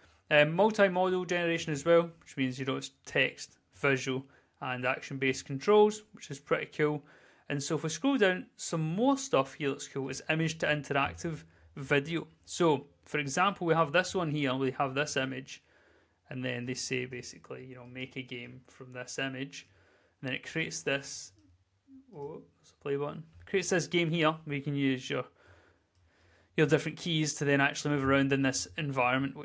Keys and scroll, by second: 14.2 w, 17.5 w, 22.6 w.